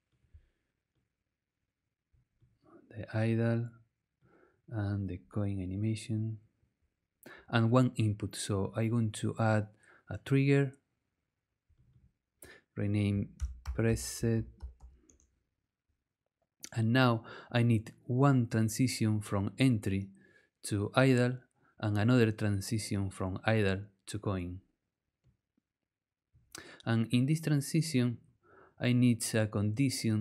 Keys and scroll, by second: 13.1-15.3 typing.